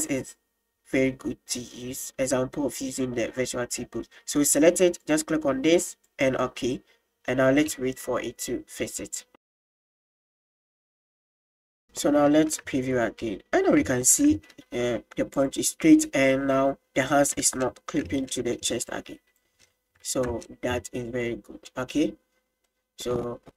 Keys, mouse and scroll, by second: 1.6 middle click, 3.6-4.0 middle drag, 5.0-10.0 drag, 12.7 space, 14.1 click, 15.5 click, 16.1 middle click, 17.7 middle click, 18.1 space, 18.3 middle click, 19.0 drag, 19.7-21.8 shift+middle drag, 22.8-23.2 middle drag.